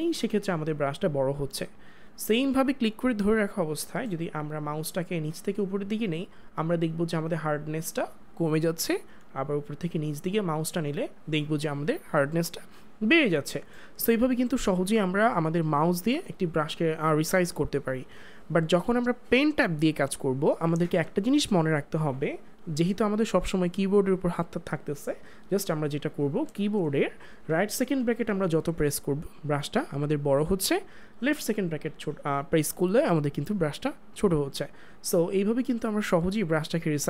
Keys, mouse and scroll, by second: 29.8-30.8 typing, 33.6 typing.